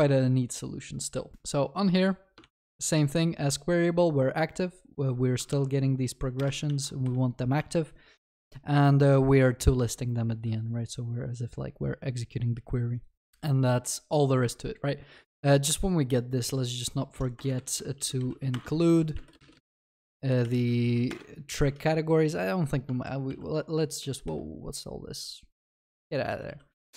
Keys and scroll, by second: 1.3 ctrl+c, 6.4 ctrl+c, 6.5 ctrl+v, 6.7 ctrl+s, 18.6 Return, 22.2 ctrl+z, 23.1 ctrl+e.